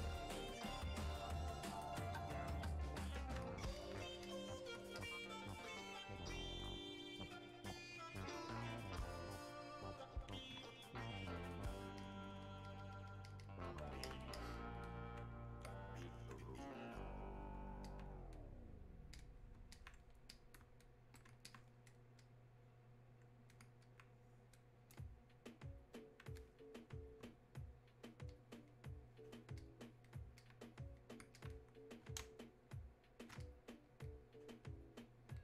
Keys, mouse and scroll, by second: 17.9-31.4 alt+drag, 32.3 space, 32.8 click, 33.0 space, 33.5-35.4 drag.